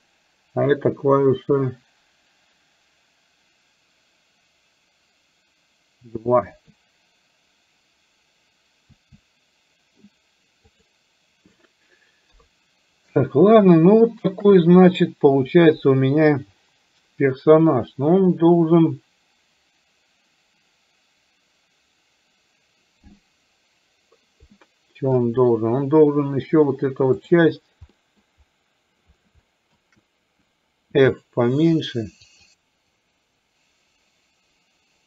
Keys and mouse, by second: 6.5 KP_2, 9.0 w, 12.3 KP_3, 13.7 shift+middle click, 24.5 middle click, 27.2 click, 27.9 middle click, 29.5 shift+middle click, 31.0 f, 32.9-35.0 drag.